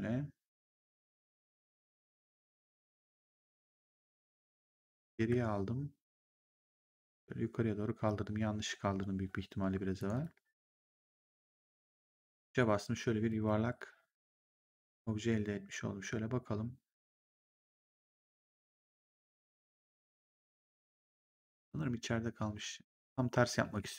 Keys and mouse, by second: 4.9 ctrl+z, 6.7 click, 9.9 click, 12.0 3, 13.2 right click, 14.6 ctrl+1, 23.5 e.